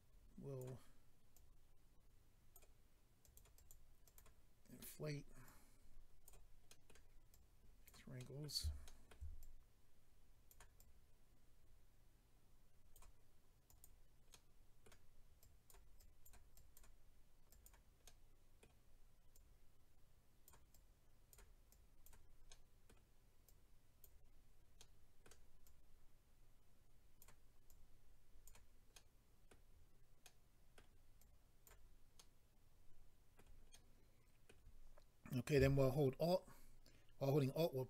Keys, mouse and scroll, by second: 1.3 click, 3.2 click, 3.3 click, 3.5 click, 3.7 double click, 4.0 double click, 4.2 double click, 4.8 middle click, 5.4 click, 6.7 middle click, 7.3 click, 8.2 middle click, 8.8 shift+middle click, 9.1 middle click, 9.4 click, 10.7 click, 13.7 click, 13.8 click, 14.3 middle click, 15.4 click, 16.0 click, 16.5 click, 17.5 click, 18.0 middle click, 19.3 click, 20.7 click, 22.0 click, 22.5 middle click, 24.0 click, 24.8 middle click, 25.6 click, 27.7 click, 28.9 middle click, 30.2 middle click, 31.2 click, 32.2 middle click, 33.7 middle click.